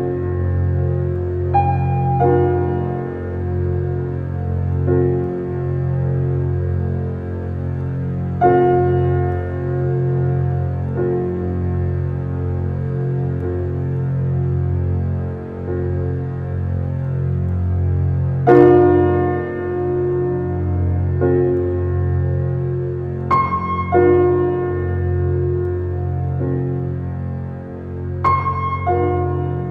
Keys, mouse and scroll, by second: 0.0-0.9 drag, 1.6 click, 2.2 click, 2.3 n, 3.2 shift+middle click, 3.8 g, 5.8-6.2 scroll up 5, 6.2 shift+middle drag, 6.4-7.0 scroll up 2, 7.0 s, 10.9-11.4 middle drag, 11.4-11.9 scroll down 2, 11.9 f, 14.7-15.9 middle drag, 15.9-16.6 scroll up 2, 16.6 Tab, 16.9 click, 17.4 middle click, 18.3 e, 24.0 click, 24.6 click, 26.0 g, 27.5 click, 28.3 click, 28.7 click, 29.0 middle click, 29.5-29.7 scroll up 1.